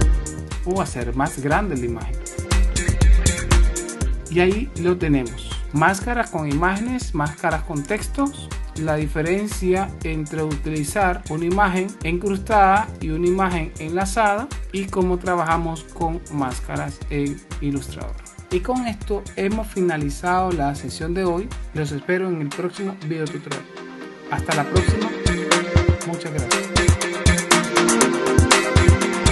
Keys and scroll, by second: 4.0 super+-, 6.5 super+x, 7.7 shift+super+z, 8.5 super+z.